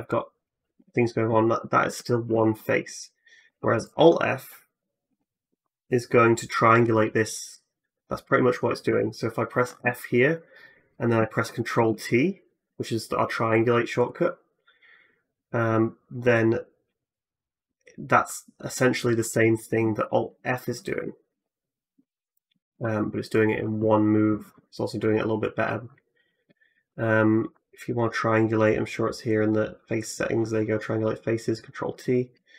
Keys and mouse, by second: 0.6 3, 0.8 middle click, 0.8 right click, 2.1 x, 3.3 2, 3.7 alt+middle click, 3.7 alt+right click, 4.9 alt+f, 8.7 ctrl+z, 9.6 f, 11.6 ctrl+t, 19.1 ctrl+z, 20.2 ctrl+z, 21.1 alt+f, 22.5 ctrl+z.